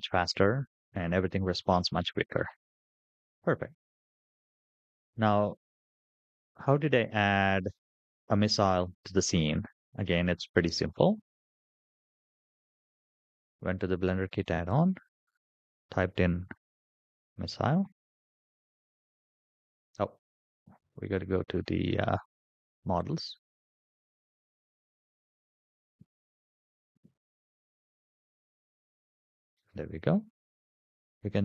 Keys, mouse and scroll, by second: 1.0 shift+middle click, 1.8 scroll down 1, 2.3-2.9 scroll up 3, 2.9-3.4 scroll down 2, 3.4 shift+middle drag, 4.3 scroll up 2, 4.9 scroll down 1, 12.4 click, 14.2 click, 14.9-16.9 drag, 16.3 s, 20.4 click, 22.5 click, 23.6-26.4 drag, 24.9 s.